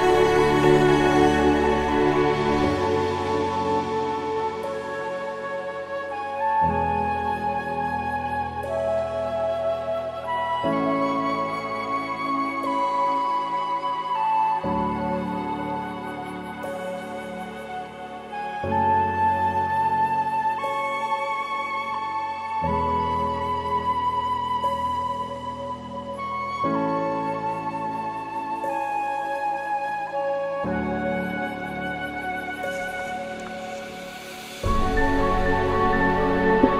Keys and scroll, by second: 2.2 ctrl+c, 5.8 ctrl+d, 13.1 ctrl+v, 22.6 ctrl+t, 23.6 ctrl+-.